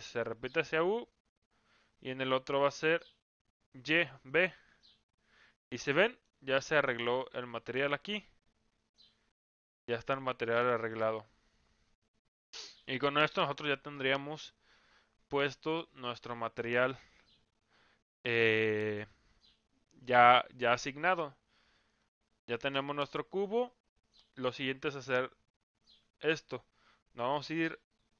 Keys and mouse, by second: 2.8-4.5 drag, 6.0 middle click, 7.6 middle click, 8.7 Tab, 9.6-10.9 middle drag.